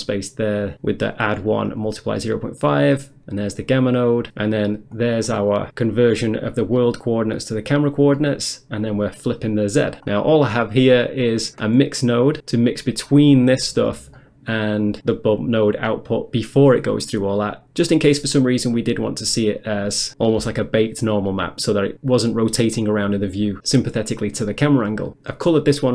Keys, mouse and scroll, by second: 0.5 click, 1.2 click, 1.7 click, 3.6 click, 5.0 click, 5.3 middle click, 6.0 middle click, 6.1 scroll up 1, 7.4 scroll up 1, 8.2 middle click, 8.9 click, 10.1-11.4 scroll down 1, 11.4 click, 11.4 scroll down 1, 14.2 middle click, 14.9 middle click, 15.0 click, 15.4 click, 17.4 middle click, 24.6 middle click, 24.9 middle click.